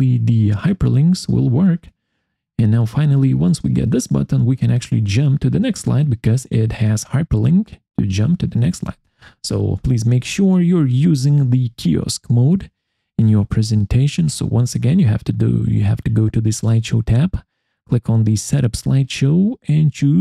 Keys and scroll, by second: 9.7 Escape.